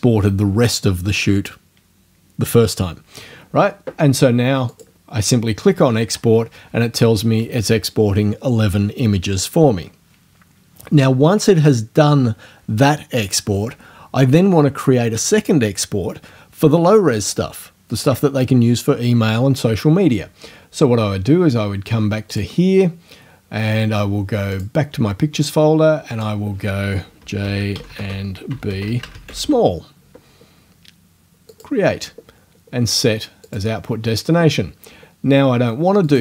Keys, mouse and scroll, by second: 4.7 click, 22.3 click, 24.5 click, 26.1 click, 26.9-29.8 typing, 31.5 click, 33.5 click, 36.1 click.